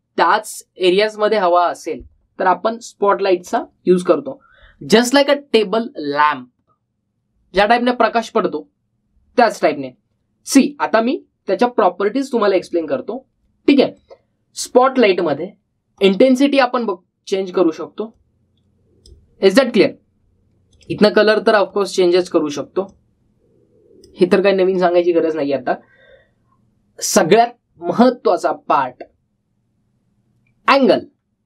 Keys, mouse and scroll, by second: 4.0-4.8 typing, 4.3 click, 13.2-13.9 typing, 13.4-15.7 drag.